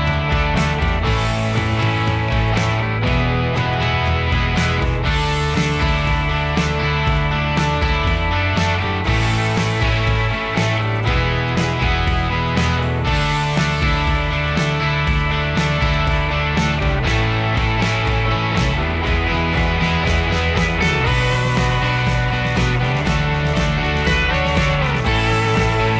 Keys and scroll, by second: 0.0 Escape, 0.5 ctrl+h, 2.3 b, 10.2 Escape, 11.8 b, 17.0 Delete, 19.4 b, 19.7 Escape, 19.8 Escape, 20.0 Escape.